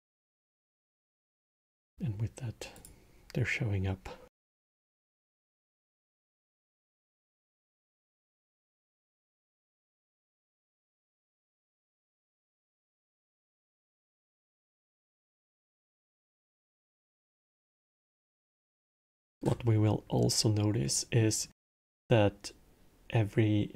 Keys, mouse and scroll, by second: 2.5 click, 6.1-8.3 middle drag, 8.3 scroll, 9.0 middle click, 9.5 scroll down 1, 9.5-9.9 scroll down 1, 9.9-14.5 middle drag, 15.4-16.3 middle drag, 16.3 scroll, 18.3 shift+Left, 19.8 scroll, 20.6-23.7 middle drag.